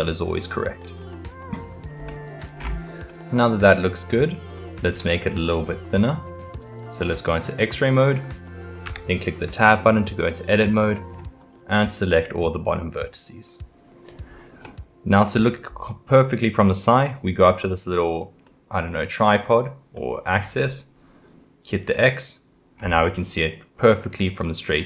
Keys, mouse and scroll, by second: 1.0-2.6 middle drag, 2.6-3.1 scroll, 3.1-4.9 middle drag, 4.9-5.2 scroll, 5.2-6.6 middle drag, 6.6-7.5 drag, 7.5-8.9 middle drag, 8.9 Tab, 10.6-11.7 middle drag, 11.7 click, 14.6-17.7 middle drag, 18.5-21.8 middle drag, 21.8 click, 22.8-24.8 scroll up 5.